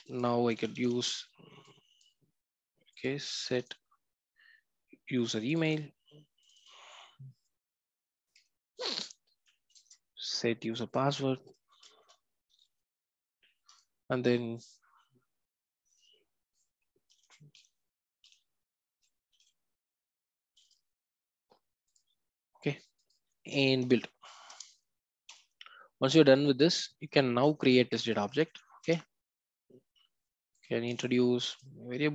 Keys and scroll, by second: 24.5 Return, 30.9 alt+Return.